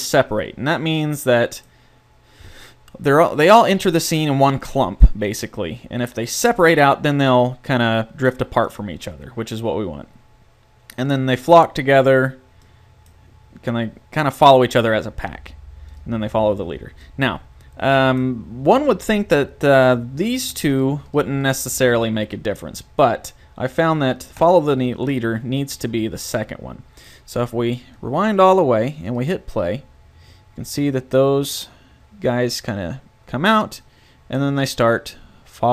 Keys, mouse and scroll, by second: 0.5-6.6 middle drag, 11.0-12.8 drag, 12.8-15.4 middle drag, 17.0 click, 20.4-23.1 drag, 24.4 click, 28.0-30.8 drag, 33.9-35.7 middle drag.